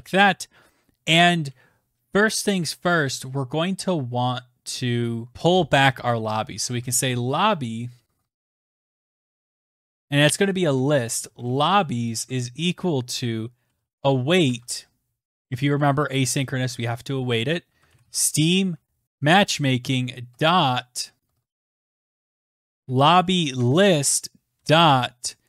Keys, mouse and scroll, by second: 5.3-7.3 typing, 8.4-9.9 typing, 11.1-12.7 typing, 15.2-20.9 typing, 21.2 Tab.